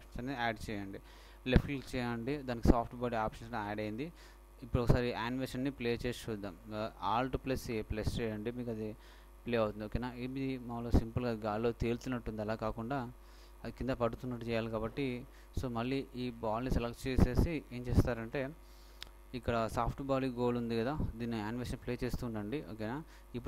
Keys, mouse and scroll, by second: 2.0-3.7 drag, 7.6 alt+a, 10.3-12.1 middle drag, 12.7-14.6 right drag, 14.3 Escape, 16.3-18.0 right drag, 22.1 alt+a.